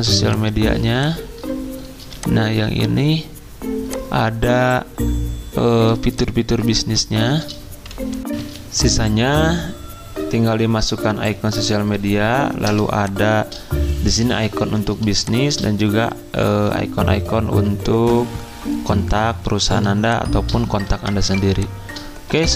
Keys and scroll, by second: 7.1 z, 8.4 z, 20.7 z.